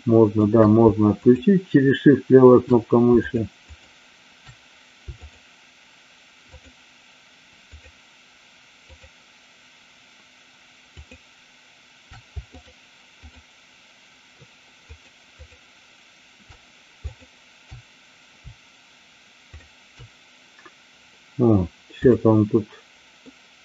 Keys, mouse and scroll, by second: 0.0 shift+middle click, 3.2-4.5 shift+drag, 10.9 shift+click, 12.4 shift+click, 19.4-20.8 shift+drag, 23.3-23.6 middle drag.